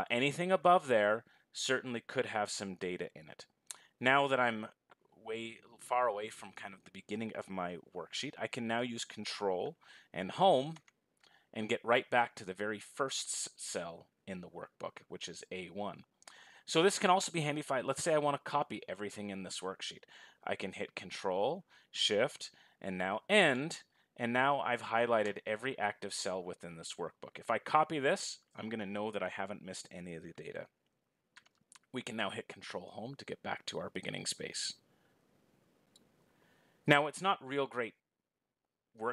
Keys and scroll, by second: 10.0 ctrl+Home, 22.8 ctrl+shift+End.